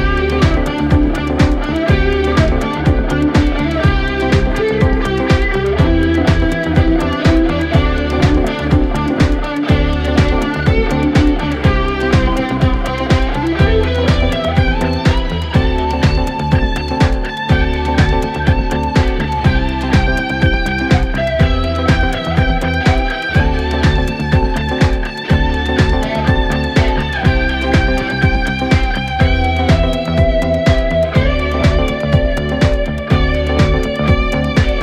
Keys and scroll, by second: 0.0 Delete, 0.9 ], 4.3 ], 8.2 F3, 9.5 ctrl+z, 12.5 ], 16.2 F2, 25.3 F3, 34.2 ctrl+z.